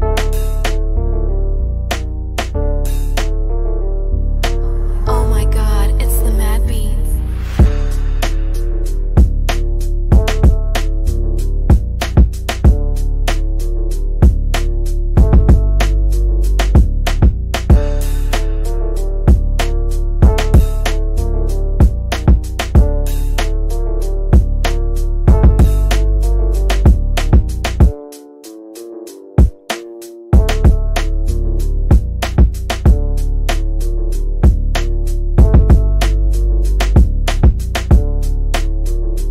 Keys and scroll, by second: 0.0 c, 6.4 w, 9.1 F3, 38.0 shift+F2, 38.8 F3.